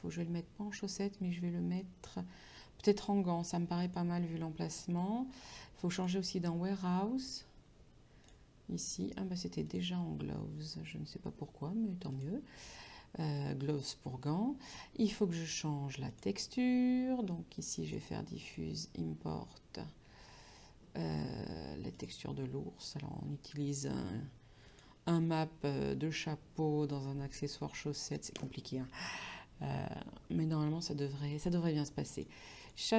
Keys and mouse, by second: 3.9 click, 6.0 click, 8.3 click, 10.6 click, 12.2 click, 16.2 click, 17.9 click, 22.0 click, 24.8 click, 32.2 click.